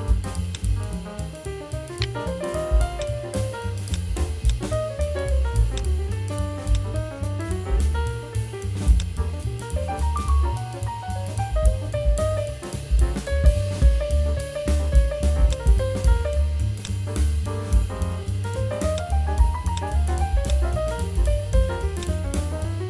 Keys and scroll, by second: 1.2 v, 6.2 3, 14.1 v, 15.7 d, 16.1 /, 22.6 a.